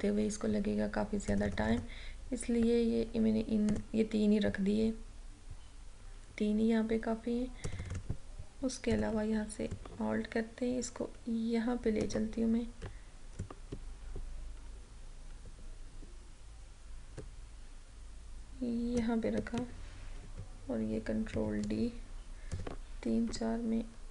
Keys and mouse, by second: 7.8-20.3 drag, 20.3 ctrl+d, 22.6 click, 23.4 Right.